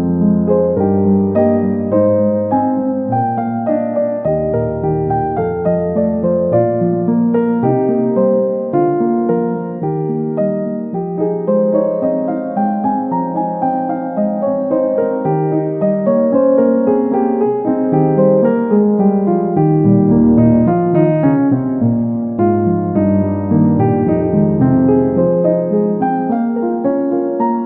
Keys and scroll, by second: 20.5 x.